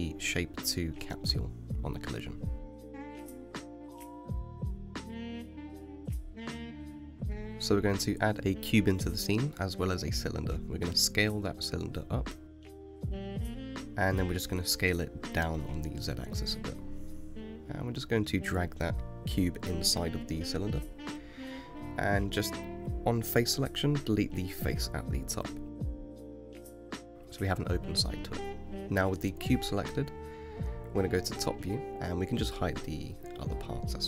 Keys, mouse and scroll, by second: 0.5-2.6 middle drag, 2.6 click, 3.8 shift+a, 9.9-12.0 scroll down 6, 12.0 s, 15.0 s, 17.4 g, 18.0 click, 18.9 g, 20.7-22.0 middle drag, 22.0 click, 22.5 Tab, 24.2 3, 24.6 click, 25.6 Delete, 30.4 KP_7, 31.2 scroll down 6, 31.7 scroll up 2, 33.2 click, 33.9 scroll up 3.